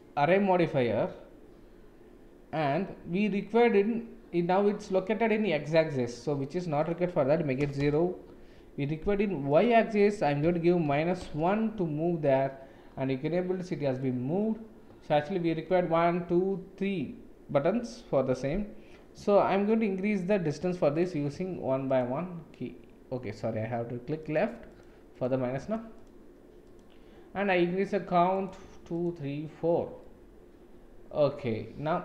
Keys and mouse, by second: 6.9-8.6 middle drag, 9.6-11.9 middle drag, 13.2-14.0 middle drag, 20.9 middle click, 24.7 middle click, 25.1 middle click, 25.7 click, 26.0 click, 26.6 click, 28.4 click, 28.9 click, 30.0-32.0 middle drag.